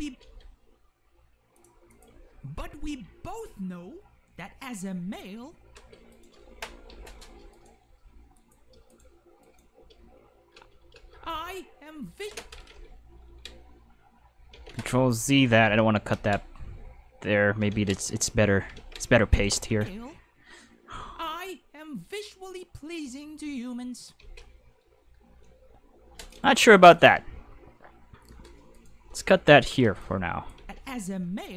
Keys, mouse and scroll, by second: 0.1 space, 0.2 g, 1.6 click, 1.9 click, 2.1 space, 5.7 space, 6.1 right click, 6.9 k, 7.5 right click, 7.8 g, 8.4 click, 8.9 right click, 9.4 right click, 9.7 space, 10.6 space, 10.9 space, 12.2 space, 12.7 ctrl+z, 13.7 middle click, 14.5 ctrl+z, 15.6 ctrl+z, 16.1 ctrl+z, 17.7 ctrl+z, 18.7 ctrl+z, 19.3 click, 19.7 space, 24.2 space, 24.4-26.3 middle drag, 26.3 right click, 26.6 g, 26.9 click, 28.7 right click, 29.0 k, 30.0-30.5 drag, 30.6 space.